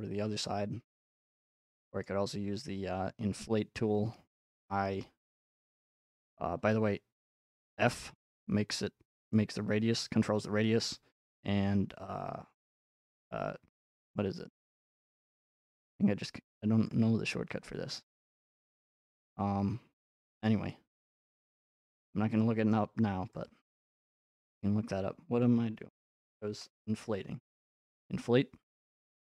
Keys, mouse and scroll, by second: 0.0-0.3 scroll up 1, 0.5 middle click, 1.2 click, 1.2-4.1 middle drag, 7.8 f, 9.3 click, 16.9-19.0 drag, 22.7-24.2 middle drag, 24.2-26.1 drag, 28.8 click.